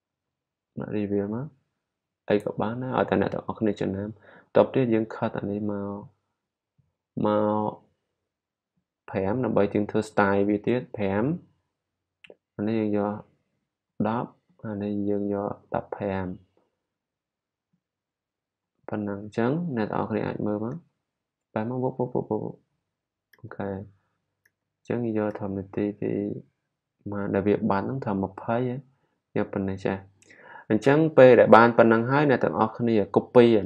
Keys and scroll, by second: 0.0-1.1 typing.